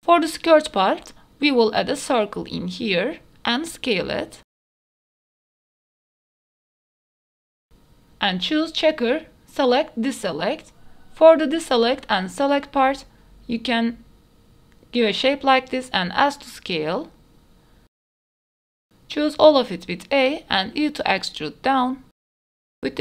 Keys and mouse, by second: 0.0 shift+a, 1.8 Tab, 1.8 middle click, 2.2 shift+middle click, 2.6 middle click, 2.8 Tab, 3.5 g, 3.8 z, 4.5 s, 5.3 shift+middle click, 5.7-7.2 typing, 6.8 shift+middle click, 7.7 Tab, 8.9-10.1 drag, 10.6 middle click, 14.2 click, 15.0 click, 16.2 middle click, 17.1 s, 18.5 click, 18.6 middle click, 19.0 a, 19.8 e, 20.3 z, 22.3 s, 22.8 middle click.